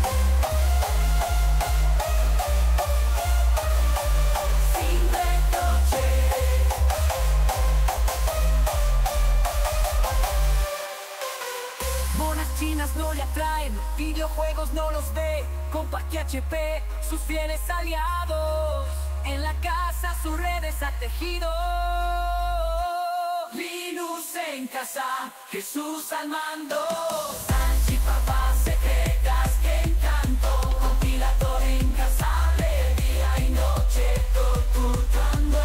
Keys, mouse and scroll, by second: 2.9-14.7 drag, 14.7 right click, 27.6-28.6 drag.